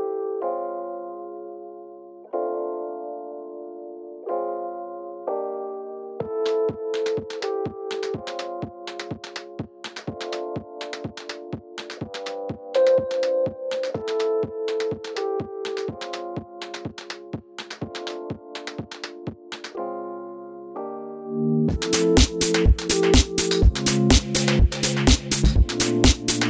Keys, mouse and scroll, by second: 0.0 z, 0.6 click, 1.3 e, 2.0 click, 3.2 f, 3.4 click, 3.8 e, 4.3 click, 5.5 f, 7.9 KP_1, 10.1 e, 10.8 click, 10.9-19.8 middle drag, 11.7 KP_7, 12.1 shift+scroll down 1, 12.3 scroll up 1, 12.5 scroll down 1, 13.1 ctrl+r, 16.4 k, 19.4 Return, 19.8 click, 20.4 2, 20.5 click, 21.1 e, 22.0 click, 22.1 1, 22.2 click, 22.4 g, 23.4 click, 25.5 click, 26.1 g.